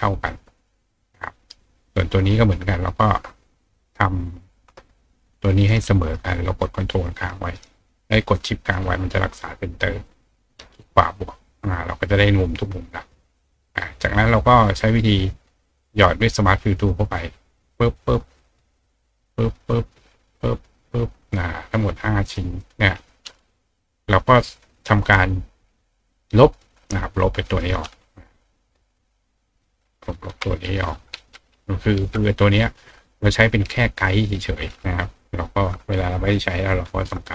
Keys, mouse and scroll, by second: 2.5 shift+click, 3.4 click, 4.0 click, 4.4 click, 5.5-10.1 shift+drag, 9.4 shift+right click, 11.2 click, 15.1 click, 16.7 click, 17.6 click, 18.6 click, 19.2-20.2 drag, 20.6 click, 22.2 click, 22.6 click, 24.9 click, 25.8 click, 26.9-30.3 drag, 33.1 click, 33.4 click, 34.2-37.2 drag.